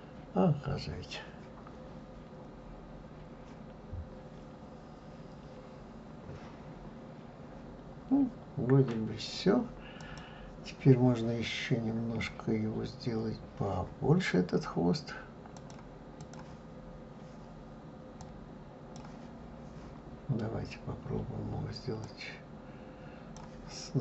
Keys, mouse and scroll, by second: 10.0 click, 15.6-21.2 drag, 22.0-24.0 drag.